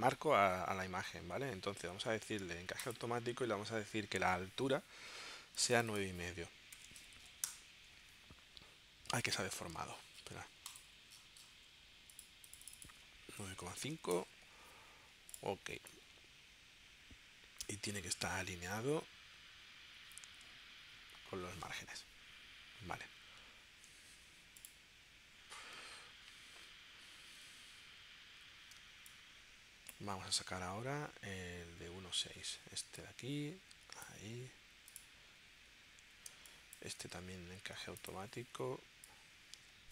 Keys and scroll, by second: 6.8 9, 7.4 Return, 9.7 super+z, 13.4 9, 14.1 Return, 28.8 space, 36.3 space.